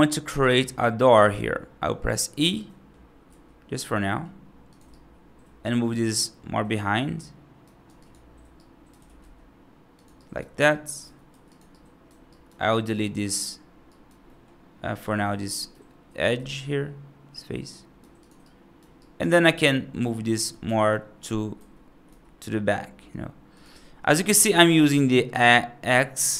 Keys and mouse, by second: 2.5 middle click, 3.1 e, 4.8-7.5 right drag, 7.7 3, 8.4 right click, 8.6 right click, 8.8 g, 10.1 right click, 10.5 1, 10.9 3, 10.9 2, 11.6 right click, 12.1 right click, 12.6 right click, 12.9 middle click, 13.7 right click, 14.1 middle click, 15.1 middle click, 15.6 x, 16.2 x, 17.6 right click, 18.1 click, 18.3 right click, 18.8 right click, 19.3 x, 20.2 g, 24.0 right click, 24.8 right click.